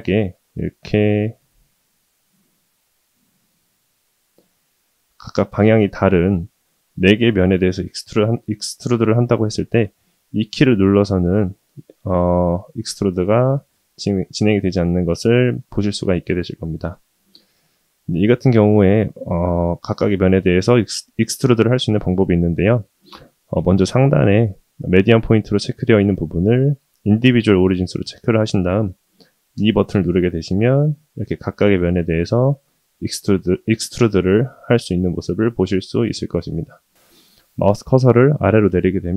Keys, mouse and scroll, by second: 0.0-2.3 middle drag, 3.0 click, 4.1 shift+click, 4.5 middle click, 5.5 shift+click, 5.9 middle click, 6.7 shift+click, 7.4 middle click, 8.5 middle click, 9.7 shift+middle click, 10.1 middle click, 12.4 e, 14.6-15.3 middle drag, 16.2 ctrl+z, 16.8-18.3 middle drag, 18.8 shift+middle drag, 19.3-19.9 middle drag, 27.2-30.0 drag.